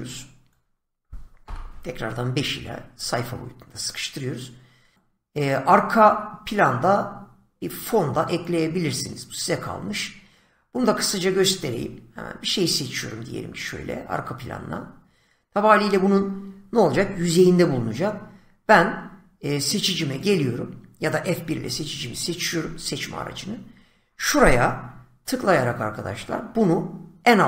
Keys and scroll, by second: 1.4 5, 21.6 F1, 24.6 <.